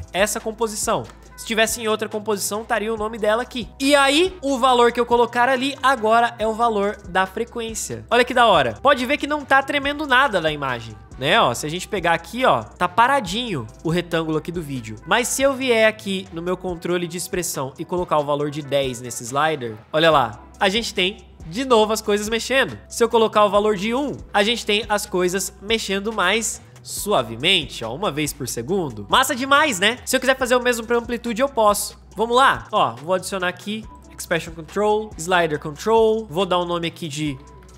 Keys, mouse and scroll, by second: 8.7 space, 20.1 space, 22.6 space, 29.0 space, 36.2 Return, 36.9-37.7 typing.